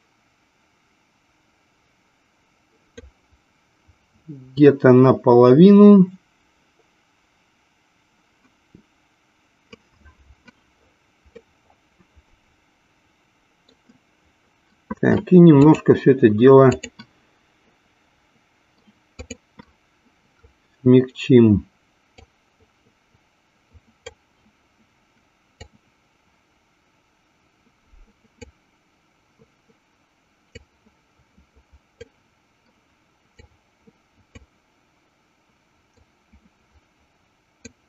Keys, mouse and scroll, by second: 11.9-14.1 middle drag, 15.7-17.5 drag, 19.4 click, 22.6-24.6 drag, 26.2-29.1 drag, 31.1-32.7 drag, 34.1-35.2 drag, 36.7-37.8 drag.